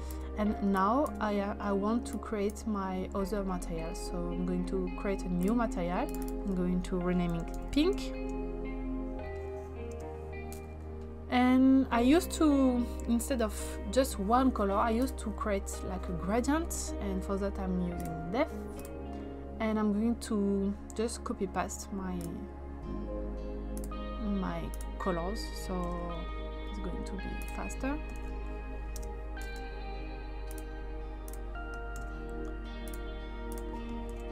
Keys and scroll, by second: 7.1-8.4 typing, 9.9 Return, 25.8 ctrl+c, 28.2 ctrl+v, 29.0 Return, 32.0 ctrl+c, 34.1 ctrl+c.